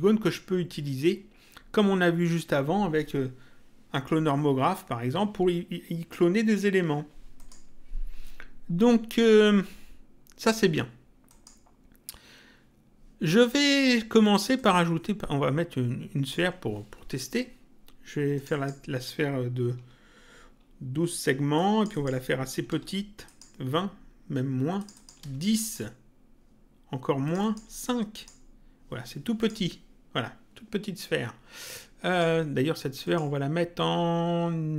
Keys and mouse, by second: 7.4 click, 11.2 click, 14.6 click, 18.4 click, 21.6 click, 23.2 click, 24.8 click, 27.2 click, 29.4 click, 32.0 click.